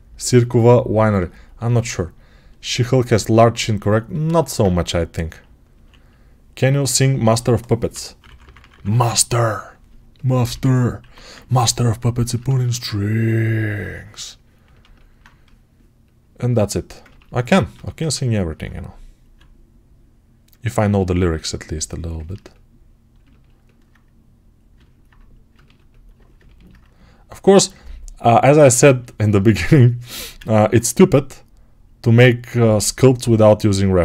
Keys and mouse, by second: 5.6 1, 7.8 [, 8.1-9.7 [, 10.4 2, 10.9 1, 17.6 g, 30.0 g.